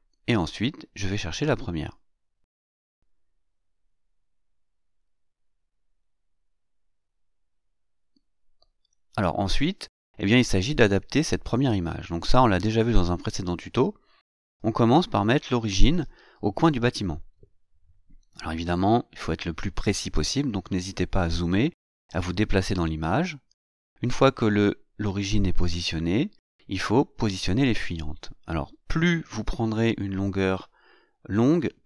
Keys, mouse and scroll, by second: 2.2 click, 3.7 click, 4.9 click, 6.4 click, 9.4-14.7 drag, 15.8-16.7 scroll up 2, 16.7 scroll down 1, 16.8-17.2 scroll up 1, 17.2-18.0 scroll down 1, 18.0 click, 22.5-23.1 scroll down 2, 23.1-24.3 scroll up 2, 24.5 shift+middle click, 24.7 shift+scroll up 2, 25.0-25.9 shift+scroll down 4, 25.4 shift+middle click, 26.4 click, 27.2 scroll down 2, 27.5-29.6 drag, 30.4-31.8 drag.